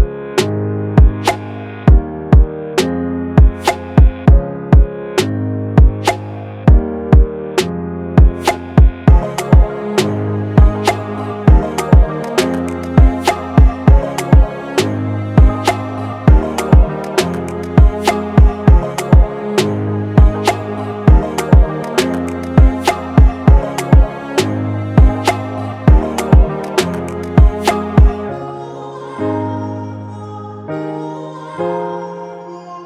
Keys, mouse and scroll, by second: 1.4 ctrl+click, 13.1 scroll up 1, 22.3 alt+click, 26.8-30.7 typing.